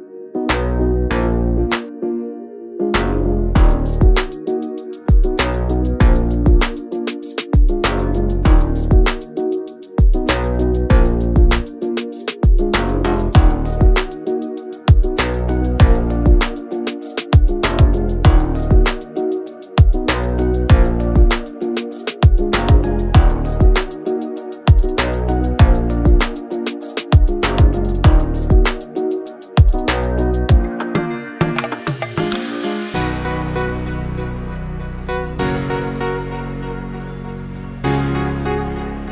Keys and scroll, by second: 0.6 space, 0.9 p, 2.8 space, 2.9 Escape, 6.2 m, 7.0 Up, 7.3-10.5 typing, 11.6 space, 12.1 Delete, 14.1 m, 14.9 Up, 15.8 space, 16.0 p, 18.4 space, 19.3 m, 20.2 Up, 20.6-23.3 typing, 24.0 Up, 24.9 space, 25.3 p, 26.6 space, 27.1 Delete, 28.8 m, 29.7 Up, 30.1-31.0 typing, 32.0 Up, 33.0 space, 33.3 p, 34.1 space, 34.7 Delete, 35.8 Escape, 37.5-39.1 typing.